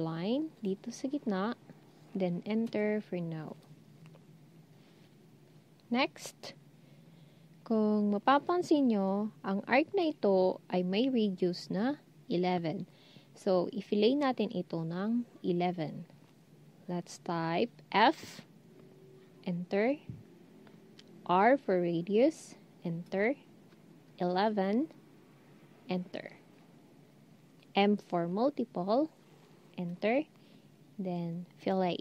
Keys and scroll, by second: 17.9 f, 21.3 typing, 24.5 typing, 27.7 m.